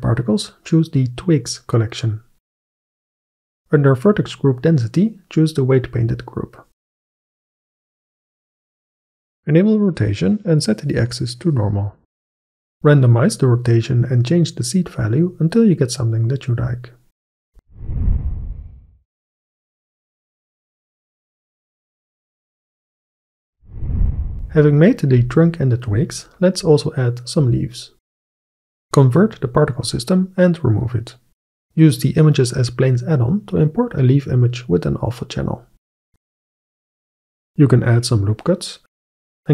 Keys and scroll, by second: 17.3 KP_2, 17.4 KP_0, 17.5 Return, 31.6 shift+a, 35.7-36.8 typing, 37.5 Tab, 38.0 ctrl+r, 38.6 ctrl+r, 38.8-39.5 typing.